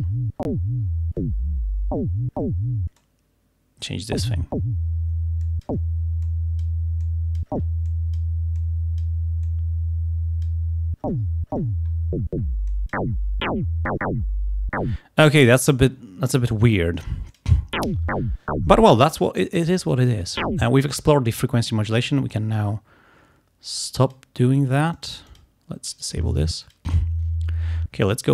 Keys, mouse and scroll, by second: 3.1-4.1 drag, 5.5 click, 6.3 click, 7.0 click, 7.9 click, 8.6 click, 9.5-10.7 drag, 12.7 click, 17.4 click, 24.1 click, 25.0 click, 25.9 click, 26.7 click, 28.2-28.3 drag.